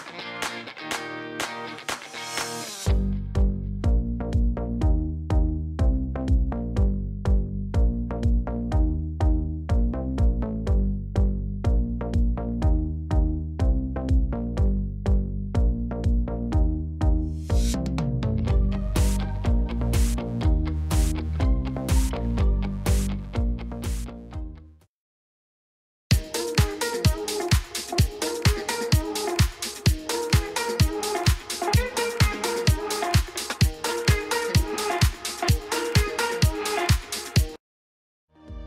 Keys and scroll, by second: 3.4 ., 3.8 9, 4.0 Return, 4.5 Tab, 5.7 shift+z, 8.1-10.9 typing, 12.3 r, 12.4 z, 16.7 r, 16.8 z, 17.9 g, 18.7 y, 21.7 g, 21.9 y.